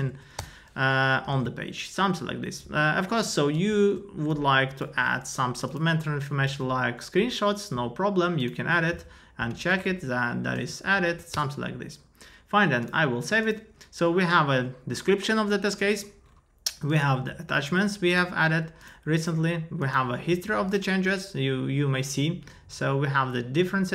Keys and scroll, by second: 0.4 Return, 1.3 super+s, 4.8 ctrl+a, 6.4 super+v, 10.0 Up, 10.6 shift+Down.